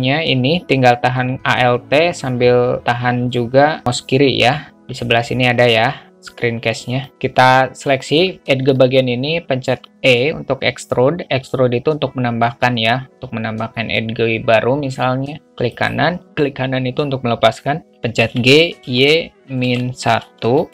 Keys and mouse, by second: 7.9 alt+middle click, 8.1 shift+a, 8.3 alt+middle click, 9.1 alt+middle click, 10.1 e, 18.5 g.